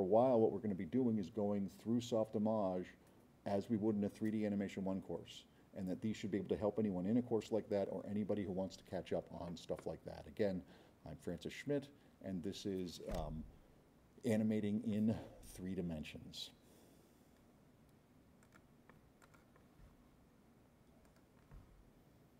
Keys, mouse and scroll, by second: 18.4 click, 19.2 click, 21.0 click, 22.3 click.